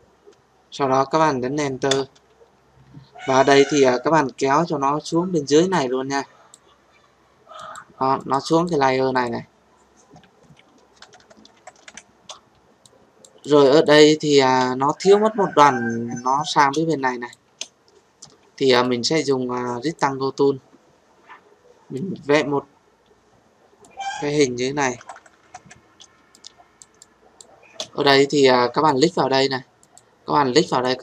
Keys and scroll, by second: 1.9 Return.